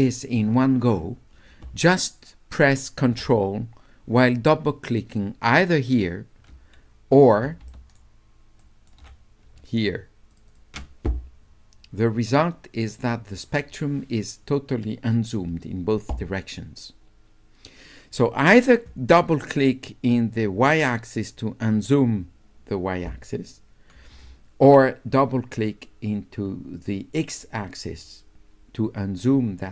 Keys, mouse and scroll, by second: 5.7 ctrl+click, 5.9 ctrl+click, 7.7 shift+right click, 8.6 shift+right click, 9.7-10.0 ctrl+scroll up 1, 10.0 ctrl+scroll down 1, 10.3 ctrl+click, 10.5 ctrl+click.